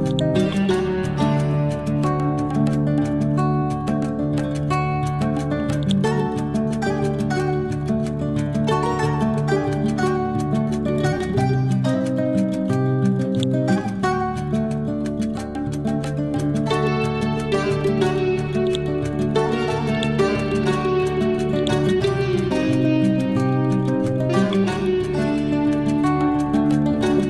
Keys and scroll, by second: 14.2 Down, 22.4 Left.